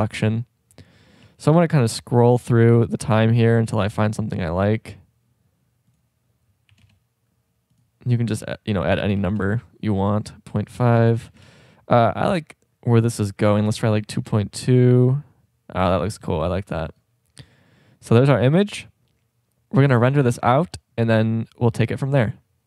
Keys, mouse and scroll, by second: 1.3 shift+b, 13.8 middle click, 15.8 middle click, 16.5 shift+b.